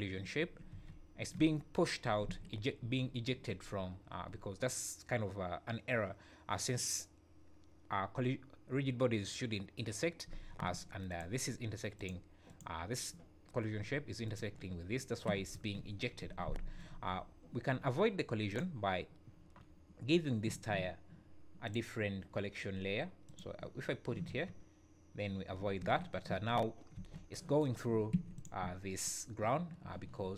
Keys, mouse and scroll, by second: 0.4 scroll down 5, 0.7 space, 2.3 Escape, 3.1 scroll up 4, 11.1 click, 12.0 click, 14.2 click, 14.8-15.3 scroll down 3, 15.3 space, 16.4 Escape, 17.0 scroll up 2, 17.5 `, 18.5 click, 21.6 click, 23.2 click, 24.2 space, 25.6-26.0 scroll down 3, 25.8 Escape, 26.9 space, 28.1 Escape, 28.3 click.